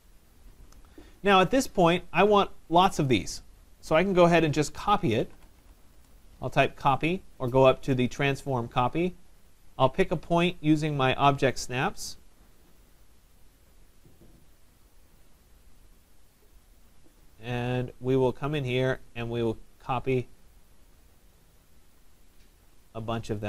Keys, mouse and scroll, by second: 0.2 scroll, 0.9 middle click, 0.9 middle click, 1.2 middle click, 2.2 click, 3.0 click, 4.5-6.1 typing, 11.6 click, 12.9 click, 13.7 middle click, 13.8 middle click, 13.9 middle click, 16.0 click, 19.2 click, 22.1 click, 22.5 middle click, 22.5 middle click, 22.6 middle click, 23.1 middle click, 23.2 middle click, 23.3 middle click.